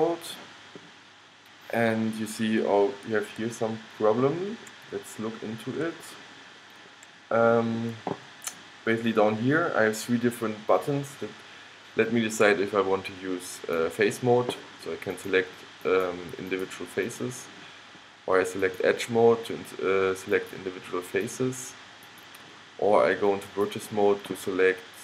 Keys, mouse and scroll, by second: 1.6-8.1 middle drag, 13.7-17.5 middle drag.